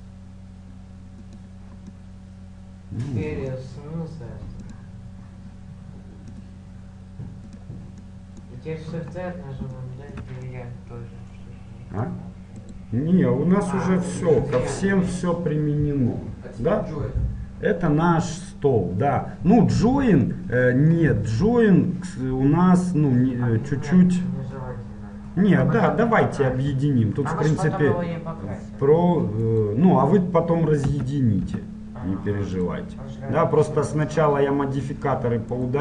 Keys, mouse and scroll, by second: 0.1-3.1 drag, 2.2-3.5 middle drag, 5.0-10.0 drag, 8.3-9.5 middle drag, 10.7-12.9 middle drag, 12.9-15.1 right drag, 14.5-29.6 middle drag, 29.6-31.6 right drag, 31.1 Tab, 31.6 Tab, 32.8-35.1 right drag, 35.1-35.8 drag, 35.7-35.8 right drag.